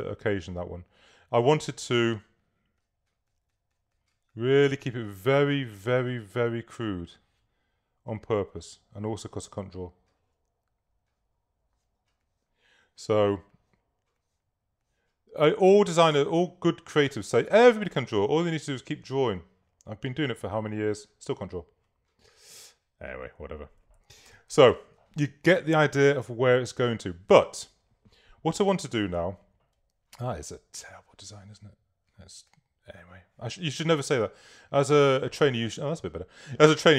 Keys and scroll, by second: 29.2 super+-, 33.9 BackSpace.